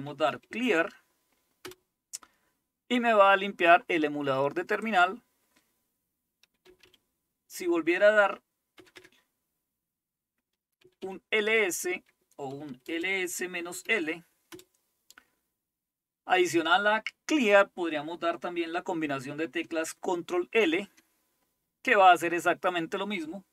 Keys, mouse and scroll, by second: 0.0-1.2 typing, 1.7 Return, 4.9 click, 6.4-7.3 typing, 8.8 typing, 10.6-14.5 typing, 20.7 ctrl+l.